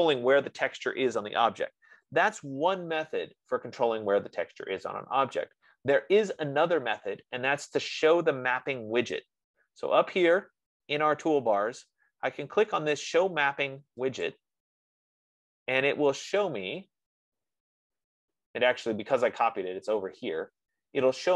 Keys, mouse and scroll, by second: 14.7 click, 17.7-18.1 scroll.